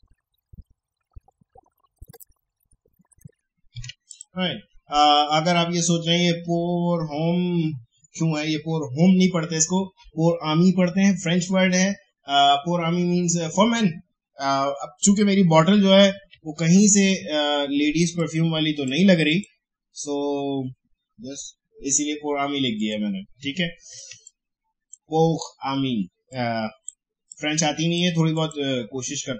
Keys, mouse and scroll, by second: 2.1 ctrl+shift+o, 2.3 shift+click, 4.1 click, 5.7 alt+scroll up 1, 15.3 alt+Caps_Lock, 15.3 alt+scroll up 1, 15.6 alt+scroll down 1, 16.3 space, 16.5 click, 16.8 space, 18.1 click, 22.7 click, 23.5 alt+scroll up 1, 24.1 space, 24.2 click, 24.5 space, 26.3-28.3 drag.